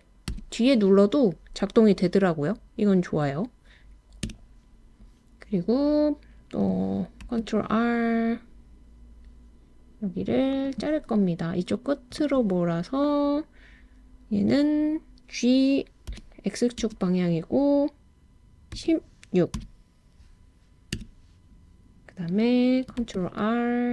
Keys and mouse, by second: 4.3 Return, 7.2 super+r, 12.2 click, 16.1 g, 16.8 x, 18.8 1, 19.6 6, 21.0 Return, 23.0 super+r.